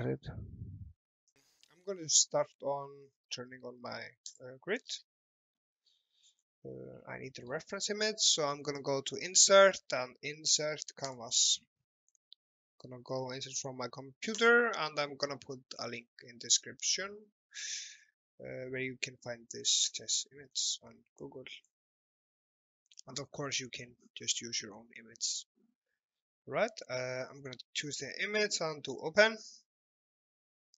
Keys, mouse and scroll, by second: 1.9 click, 4.4 click, 4.9-5.5 scroll up 1, 5.6 alt+middle click, 6.4-6.9 scroll down 1, 7.0 middle click, 8.6 click, 29.0 click, 30.4 alt+middle click.